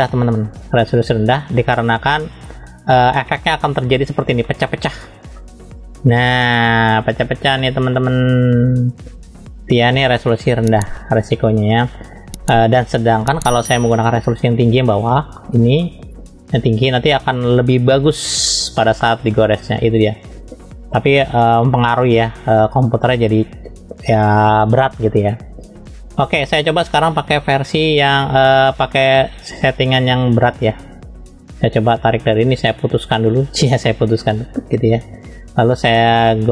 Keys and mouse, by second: 2.0 middle click, 3.3 shift+middle click, 4.4 middle click, 5.4 middle click, 6.9 middle click, 7.6 shift+middle click, 10.9-12.1 middle drag, 14.9 shift+middle click, 15.4 shift+middle click, 15.9 shift+middle click, 18.4 shift+middle click, 21.1 shift+middle click, 21.7 shift+middle click, 23.1 click, 27.5 shift+middle click, 28.8 click, 29.4 click, 30.2-31.9 drag, 33.6 click, 34.5 click.